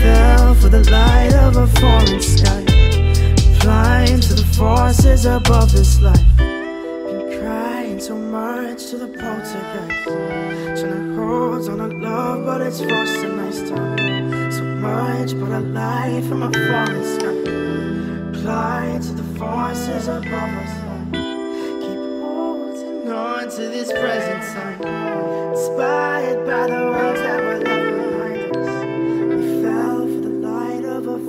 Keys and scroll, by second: 3.7 ctrl+a, 8.4 ctrl+d, 9.8 ctrl+space.